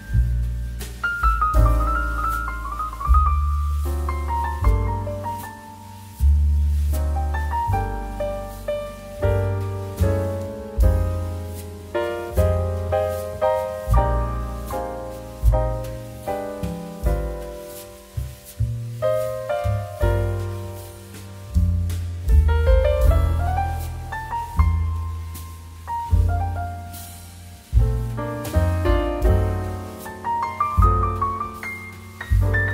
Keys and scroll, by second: 2.7-3.1 typing, 6.5 ctrl+[, 10.4 ctrl+space, 12.0 space, 13.1 space, 15.1 space, 16.7 ctrl+k, 17.5 space, 19.4 space, 21.9 space, 26.4 space, 28.9 space.